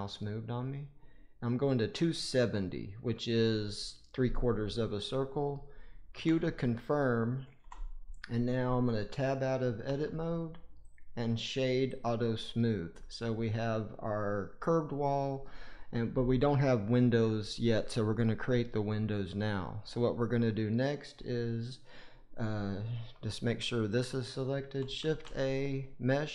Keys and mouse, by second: 7.5 Return, 9.8 Tab, 10.8 click, 10.9-12.0 right drag, 13.7-15.4 middle drag, 18.9-19.7 middle drag, 23.6 click, 24.9 shift+a.